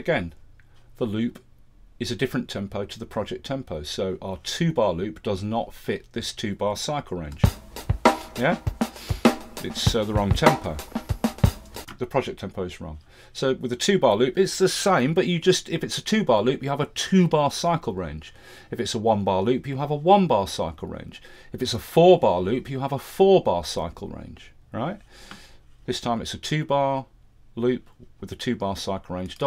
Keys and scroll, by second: 7.3 space, 11.8 space.